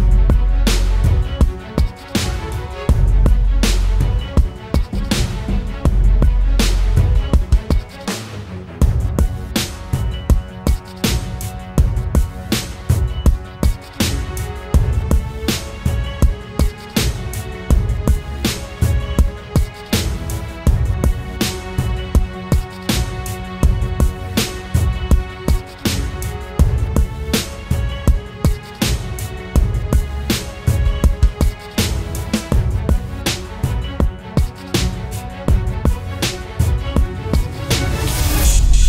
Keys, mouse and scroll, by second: 0.9-1.7 typing, 12.8 double click, 19.7-20.9 scroll up 1, 35.8 alt+click.